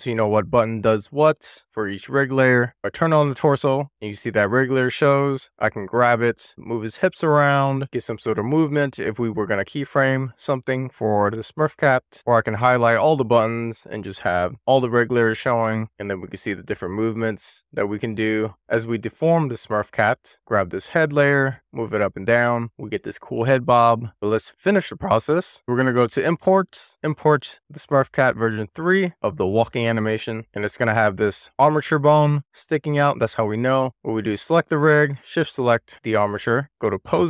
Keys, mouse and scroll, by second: 3.1 click, 4.3 click, 5.3 click, 12.0 super+z, 12.8 click, 14.0 click, 15.4 click, 16.3 click, 20.2 super+z, 21.0 click, 21.7 click, 23.1 click, 23.7 super+z, 24.0 click, 25.2-27.3 drag, 34.2 drag, 34.9 shift+click, 36.8-37.2 drag.